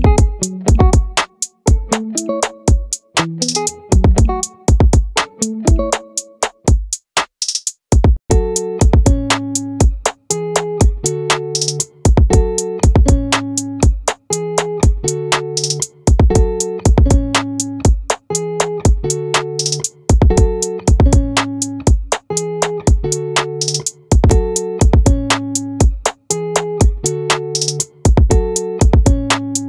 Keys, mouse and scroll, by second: 0.0 middle click, 8.6 middle click, 14.3 right click, 15.5-18.3 right drag, 18.7-19.9 drag, 22.9 middle click, 23.3-24.3 middle drag, 26.1 ctrl+z.